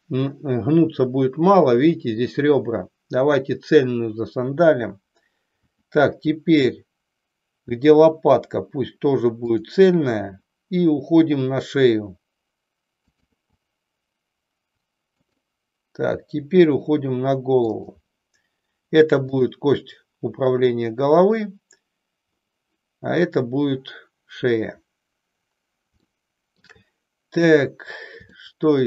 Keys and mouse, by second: 5.6 e, 10.2 e, 13.1 click, 13.3 e, 16.1 e, 17.9 click, 19.2 click, 26.1 shift+middle click, 28.3-28.8 shift+middle drag.